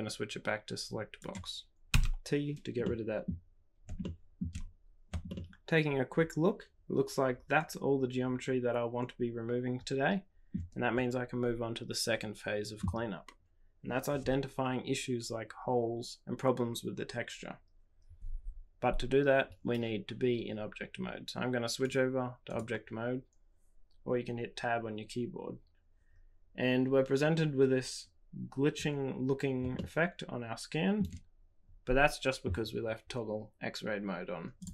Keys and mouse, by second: 1.9 t, 2.8 middle click, 2.9 click, 2.9 right click, 4.0 shift+middle click, 5.2-10.5 shift+middle drag, 21.9-24.3 drag, 29.7-30.9 shift+middle drag.